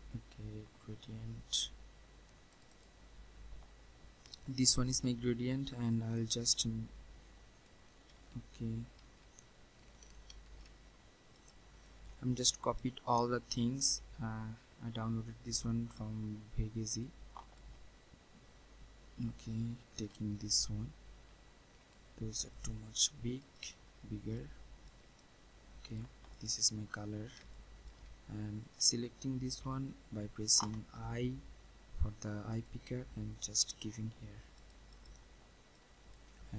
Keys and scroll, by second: 8.1 ctrl+z, 10.4 ctrl+shift+z, 14.9 Delete.